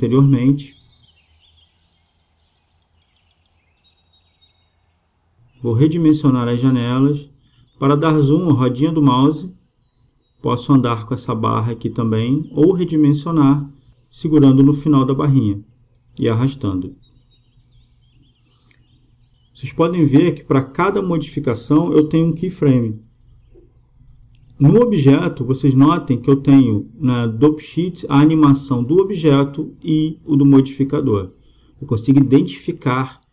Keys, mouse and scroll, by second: 1.6-3.3 drag, 4.8-7.2 drag, 7.4-9.1 drag, 9.2-11.4 middle drag, 11.4-13.2 drag, 14.8-16.5 drag, 17.4-22.1 drag, 23.0-24.8 drag, 25.6-28.9 drag, 29.9-31.6 drag.